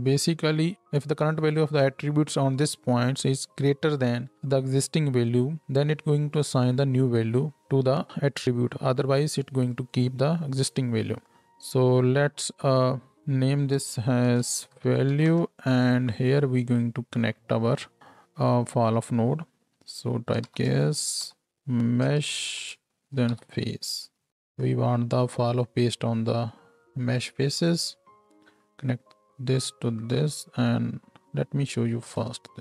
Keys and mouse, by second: 9.9-12.4 drag, 11.2 Tab, 12.4-25.6 middle drag, 25.6 click, 26.4-32.0 middle drag.